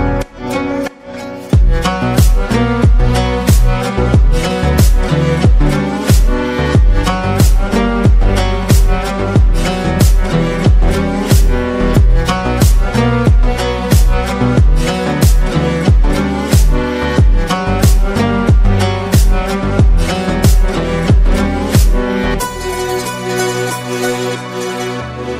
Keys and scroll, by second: 12.7 ctrl+v.